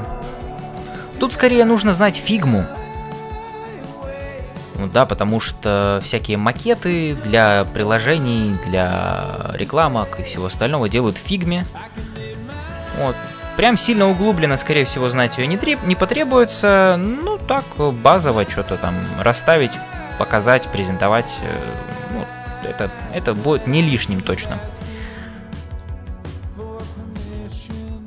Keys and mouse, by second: 2.0 shift+middle click, 3.0 middle click, 4.4 shift+middle click, 4.8-6.3 middle drag, 7.4 middle click, 10.6 click, 11.1 middle click, 12.0 f, 12.4 middle click, 16.2 click, 16.8 middle click, 17.3 f, 17.8-19.8 middle drag, 20.1 click, 21.1 f, 22.9-24.1 middle drag, 25.1 g, 26.0-27.3 middle drag, 27.6 click.